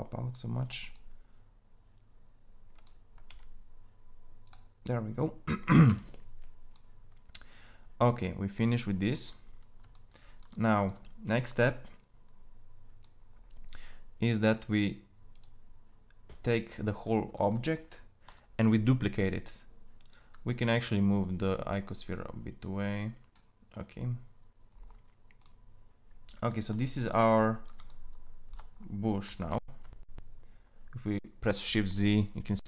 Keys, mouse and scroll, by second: 1.6-3.1 drag, 4.6 g, 5.7 Tab, 15.1-17.6 drag, 19.8 click, 21.9-22.9 middle drag, 22.9 click, 29.4 shift+z.